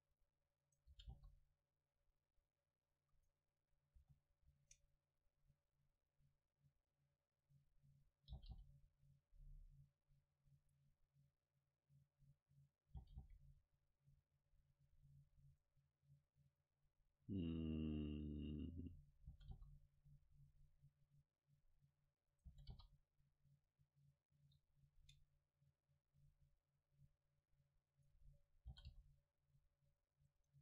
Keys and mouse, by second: 0.7-2.8 right drag, 0.9 g, 3.3 right click, 4.0 ctrl+z, 4.4 ctrl+z, 5.7-7.9 drag, 8.4 g, 11.5-13.4 drag, 13.0 g, 16.5-18.8 drag, 19.3 g, 21.7-24.5 drag, 22.3-24.5 right drag, 22.5 g, 24.6-26.4 drag, 25.0 middle click, 27.0 middle click, 28.0-29.8 right drag, 28.7 g, 30.5 Tab.